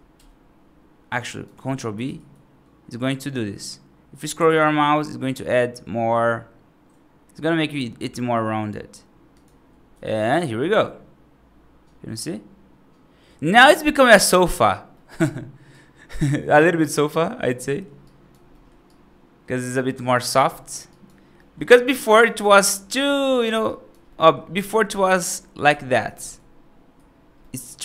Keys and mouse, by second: 1.2 right click, 1.9 ctrl+b, 9.8 F2, 10.2-13.7 right drag, 14.0 middle drag, 14.3 right drag, 14.8 middle drag, 15.6-17.3 right drag, 17.5 middle drag, 17.9 right drag, 18.4 middle drag, 18.7-20.2 right drag, 20.4 middle drag, 20.8 right drag, 21.2 middle drag, 21.6 right drag, 22.9 Escape, 23.5 right drag, 23.9 middle drag, 24.7-25.1 right drag, 25.2 middle drag, 25.5 ctrl+z, 26.0 ctrl+z, 27.3 middle click, 27.7 right click.